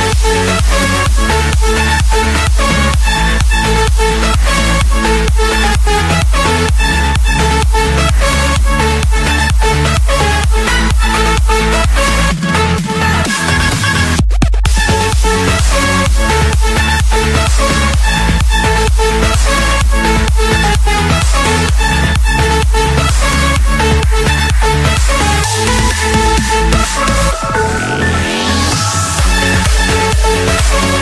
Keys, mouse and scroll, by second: 0.7 ctrl+1, 3.0-4.6 drag, 6.4 5, 7.7 Return, 11.3-12.4 drag, 12.4 Escape, 14.3-16.3 drag, 16.3 scroll down 1, 16.3 scroll down 1, 17.6 click, 18.9 click, 20.0 click, 20.8 click, 21.2-23.3 scroll, 24.1 click, 24.5-25.2 scroll, 26.8 click, 27.3 Escape, 29.3 click, 30.8-31.0 typing.